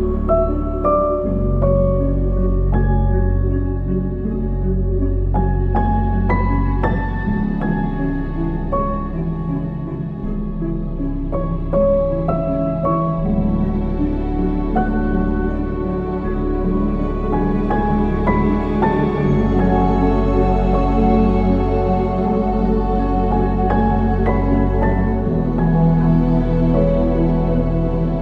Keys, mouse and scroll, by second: 1.7 g, 6.1 s, 9.2 ctrl+z, 10.3 s, 12.5-13.0 scroll up 1, 13.0-14.8 scroll down 1, 14.8 ctrl+s, 15.7 shift+a, 18.7 g, 22.4-24.4 scroll up 1, 24.4 shift+d, 25.6 g.